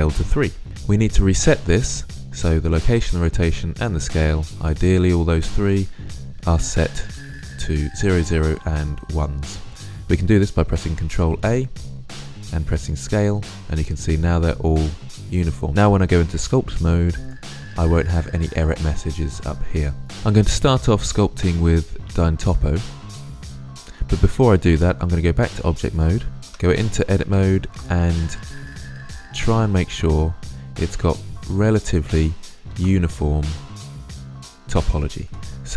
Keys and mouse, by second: 10.8 ctrl+a, 16.0 click, 25.4 click, 26.4 Tab, 27.4 ctrl+r, 31.4-32.5 drag, 32.5 ctrl+r, 34.2 ctrl+r, 35.3-35.7 middle drag.